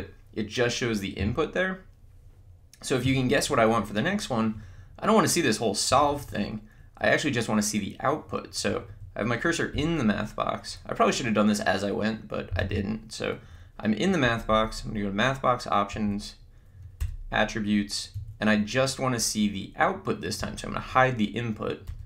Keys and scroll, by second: 5.9 Right, 12.7 Menu, 14.4 Up, 16.1 Right, 17.0 Return.